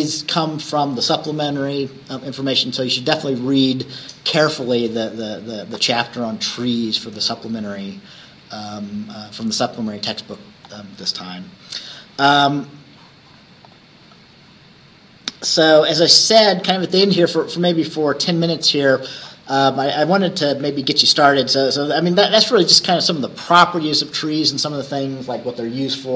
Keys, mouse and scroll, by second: 3.3 Escape, 10.7 click, 19.3-20.1 scroll down 1, 20.9-23.1 drag.